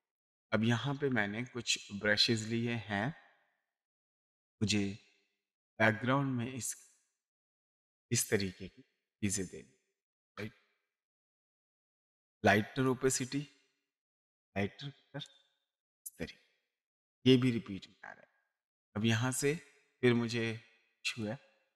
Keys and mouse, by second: 1.9 click, 6.8 click, 8.1 space, 8.3 click, 12.7 click, 14.0 click, 15.2 click, 21.1 click.